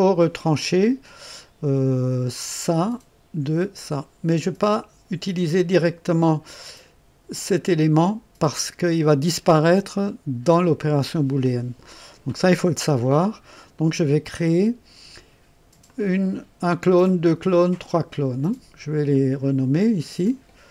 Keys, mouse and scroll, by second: 2.7 click, 15.8 click, 17.0 click, 17.6 click, 19.0 click, 20.2 click.